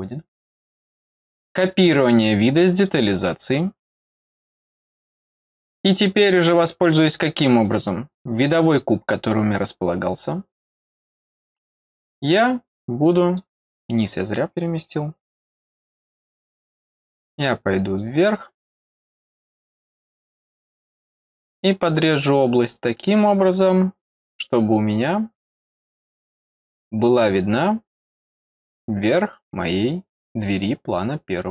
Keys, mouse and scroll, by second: 2.0 click, 2.7 click, 4.6 middle click, 4.6-4.9 scroll down 2, 4.8 middle click, 7.6 click, 9.3-13.3 drag, 16.7-17.9 drag, 20.4 click, 24.9 click, 27.6 middle click, 27.6-28.0 scroll up 2, 28.0 middle click, 29.0-30.6 drag.